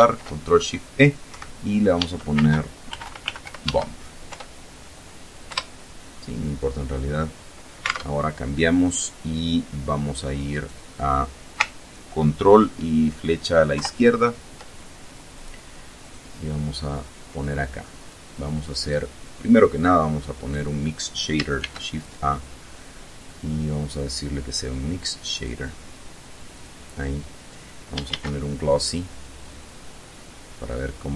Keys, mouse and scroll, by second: 0.7 Right, 1.4 Caps_Lock, 1.8-3.3 typing, 3.7 Return, 4.9 Return, 7.3 alt+Tab, 9.9 right click, 13.2 ctrl+Left, 15.4 click, 16.0-17.0 middle drag, 17.5 click, 19.9 click, 21.0 shift+a, 24.8 click, 25.9 click, 27.5 shift+a.